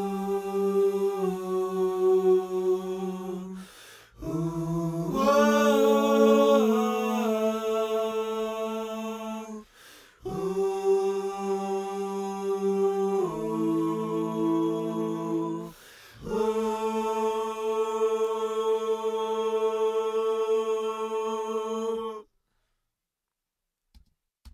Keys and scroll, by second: 23.9 space.